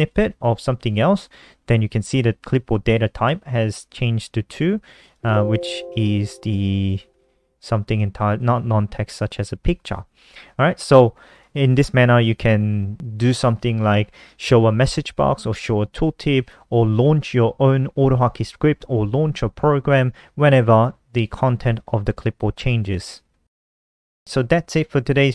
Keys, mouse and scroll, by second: 0.0 click, 5.0 click, 5.8 click, 6.3 click, 7.1 click, 8.3 click, 9.3 click, 11.3 click, 22.9 click, 23.7 ctrl+c, 24.5 click, 24.9 ctrl+c.